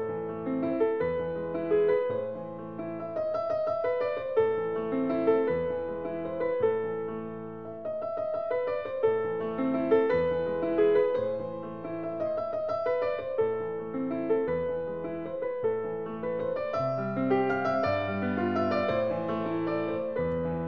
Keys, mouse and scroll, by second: 0.0 Escape, 0.3 scroll down 4, 1.9 click, 2.6 click, 4.3 click, 8.5 s, 9.4 click, 10.3 click, 13.0 click, 16.0-16.6 typing, 17.0 Return, 18.7-19.2 scroll, 19.6 scroll, 19.7 Escape, 20.4 s.